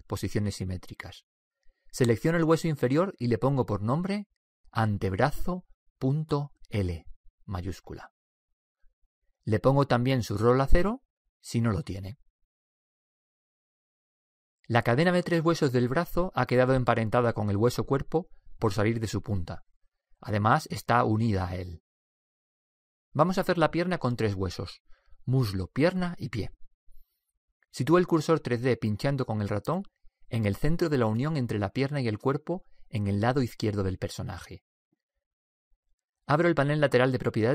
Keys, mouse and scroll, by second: 3.3 right click, 4.2 click, 5.2 right click, 5.2 click, 7.2 BackSpace, 13.8-15.6 middle drag, 16.2-17.8 middle drag, 17.8-21.5 right drag, 34.4-36.2 drag.